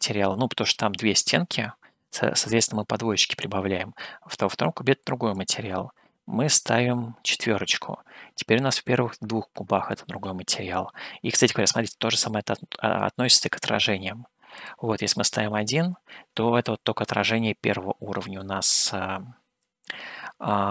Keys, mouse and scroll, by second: 5.4-10.8 drag, 11.6-12.7 middle drag, 14.6-16.1 drag, 17.4 shift+middle click, 18.5-20.6 middle drag.